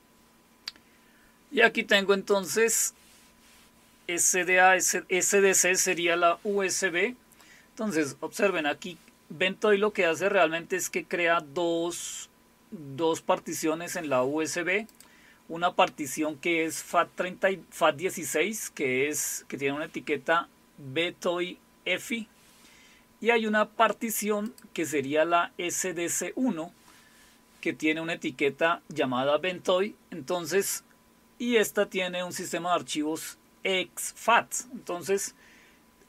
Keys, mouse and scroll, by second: 2.3 click, 5.5 click, 14.9 click, 24.4 click.